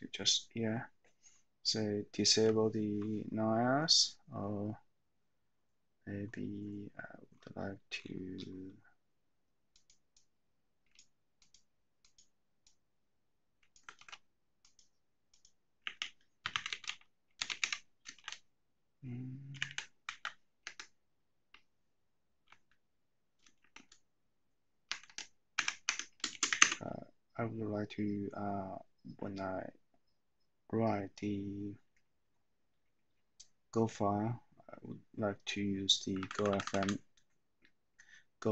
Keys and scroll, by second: 14.1 ctrl+c, 16.0-18.1 typing, 19.7-20.1 typing, 20.1 super+v, 20.6 Escape, 22.6 Left, 25.0 Escape, 25.2 Escape, 25.5-27.0 typing, 25.9 Escape, 36.1 Left, 36.2 Left, 36.5 Left.